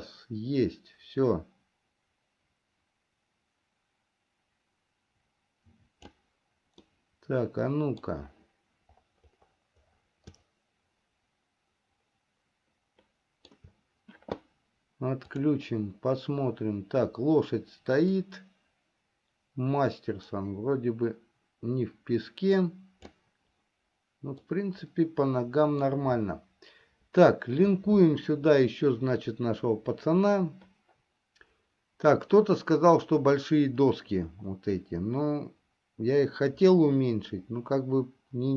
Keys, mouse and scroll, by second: 7.5-8.6 middle drag, 11.0-14.1 shift+middle drag, 15.8 click, 18.4-19.7 drag, 20.4-24.5 drag, 25.1-26.8 middle drag.